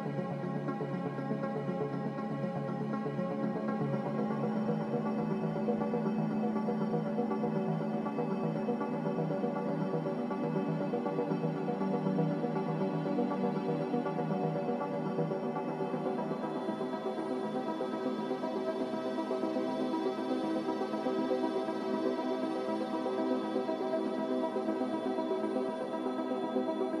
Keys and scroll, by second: 0.0-0.3 typing, 9.0-9.8 typing, 14.6 Return.